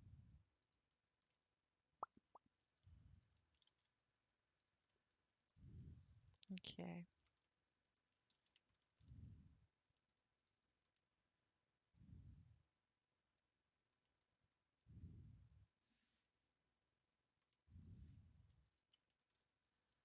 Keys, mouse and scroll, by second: 0.9-1.3 scroll down 4, 1.3-2.7 middle drag, 2.7 click, 3.2 shift+click, 3.6 g, 4.9 middle click, 5.5-5.8 scroll down 1, 5.8-7.0 middle drag, 7.0 shift+click, 7.4 middle click, 8.4 ctrl+z, 8.7 scroll up 3, 9.0-10.1 shift+middle drag, 10.1-11.0 scroll down 10, 11.0-13.4 middle drag, 13.4 scroll down 4, 13.5 scroll up 1, 13.6-14.0 scroll down 1, 14.0-17.1 middle drag, 17.5 middle click, 18.1-19.1 scroll up 4, 19.1-20.0 shift+middle drag.